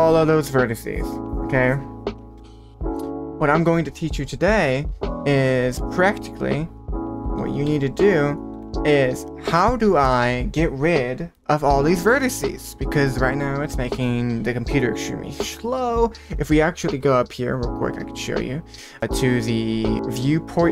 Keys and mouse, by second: 2.3 Tab, 2.8 q, 5.9 click, 7.6 h, 8.5 `, 18.8 click, 19.9-20.7 drag.